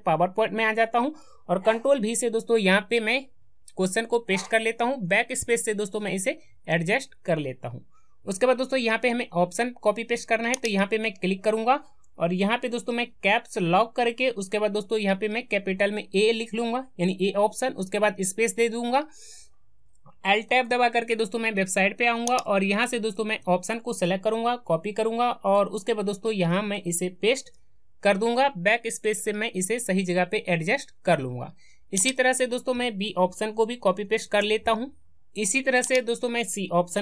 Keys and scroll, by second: 1.7 ctrl+v, 20.4 alt+Tab, 24.4 ctrl+c, 25.5 alt+Tab, 27.3 ctrl+v.